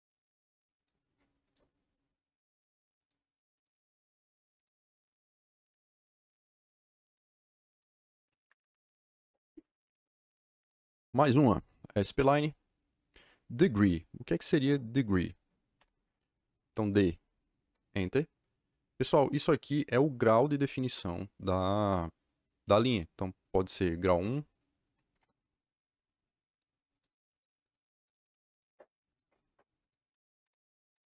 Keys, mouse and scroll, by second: 0.7 click, 1.4 click, 2.9 click, 4.5 click, 5.5 click, 7.0 click, 7.6 click, 8.3 Escape, 10.0-10.9 typing, 15.7 d, 17.6 KP_Enter, 25.0 KP_1, 25.1 KP_Enter, 26.5 click, 27.3 click, 27.6 click, 27.9 click, 28.2 click, 28.4 click, 28.7 click, 29.0 click, 29.7 click, 30.3 KP_Enter, 30.8 KP_Enter.